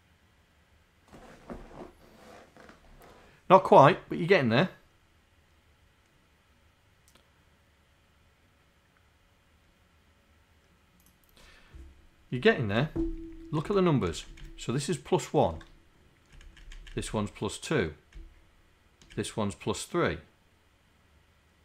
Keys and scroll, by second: 14.3 Right, 15.6 Right, 16.5 Right, 16.9 Right, 17.1 Right, 18.2 Right.